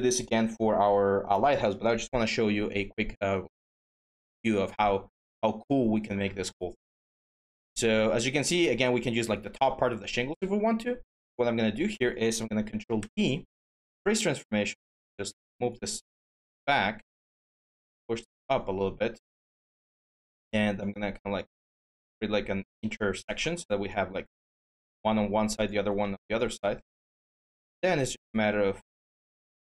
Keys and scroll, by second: 12.8 ctrl+d.